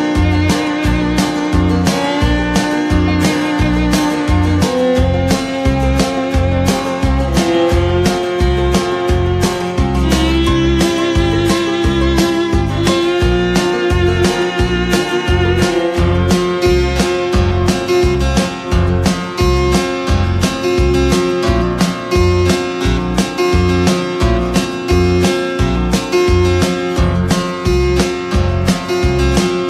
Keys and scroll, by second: 4.3 ctrl+[, 17.0 ctrl+c, 17.1 ctrl+v, 21.8 ctrl+[.